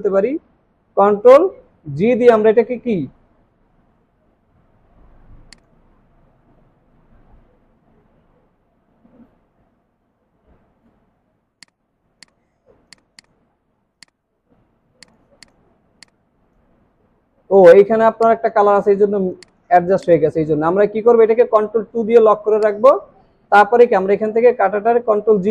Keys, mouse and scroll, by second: 1.7 ctrl+g, 6.9 ctrl+g, 13.2 double click, 15.7 alt+scroll down 1, 16.5 space, 16.7 alt+scroll down 1, 18.6 space, 18.9-19.2 alt+scroll up 4, 19.4 space, 20.3-21.3 alt+scroll up 1, 21.9 ctrl+2, 24.9 ctrl+g.